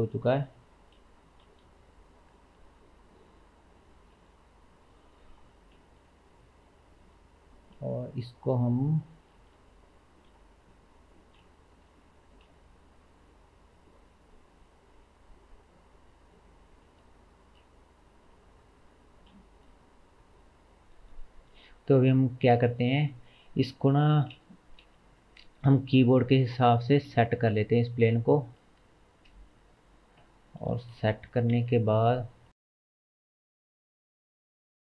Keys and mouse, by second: 0.0-0.7 drag, 0.9-5.0 drag, 1.5 a, 4.2 g, 5.0-7.5 middle drag, 7.5 click, 7.5-8.1 shift+middle drag, 11.4-12.1 shift+middle drag, 12.1 r, 14.5 middle click, 17.3-18.8 shift+middle drag, 18.2 Tab, 18.8-22.5 drag, 23.8 g, 28.6-29.8 shift+middle drag, 29.8-33.5 drag, 31.0 g, 33.9 click, 34.4 g.